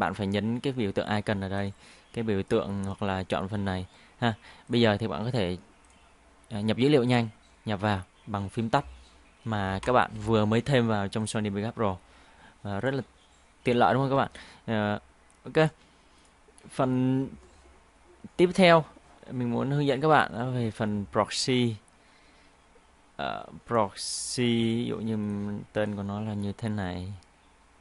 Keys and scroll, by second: 9.8 ctrl+i.